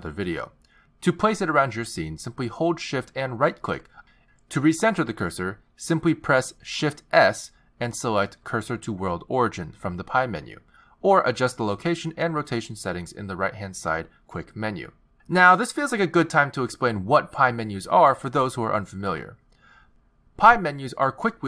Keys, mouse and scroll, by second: 1.0 x, 3.9 shift+right click, 5.4 shift+right click, 7.5 shift+s, 8.2 shift+s, 13.5 click, 14.6 click, 20.4 n.